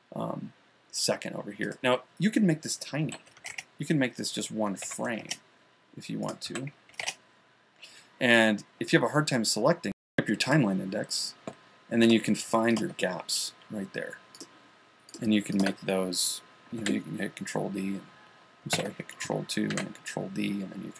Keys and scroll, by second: 3.9 Return, 5.5 1, 18.7 super+2.